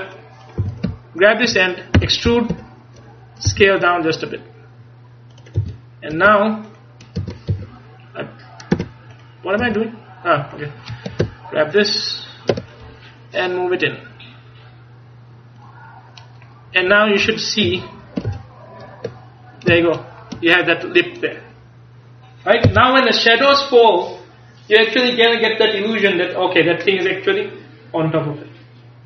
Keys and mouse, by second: 0.7 a, 2.0 e, 3.5 s, 5.4 click, 5.7 a, 6.2 Tab, 7.3 Tab, 7.6 a, 8.8 Tab, 9.7 Tab, 11.3-12.9 ctrl+KP_Add, 16.8 Tab, 17.7 KP_1, 18.3 ctrl+KP_3.